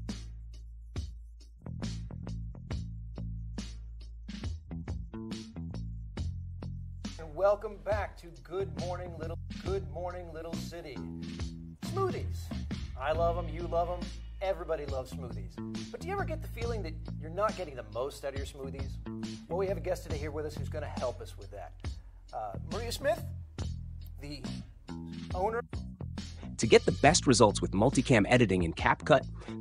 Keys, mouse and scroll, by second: 0.7 2, 1.7 3, 3.6 2, 4.5 1, 5.7 2, 6.7 space, 6.7 click, 7.1 space, 9.2 click, 25.5 space.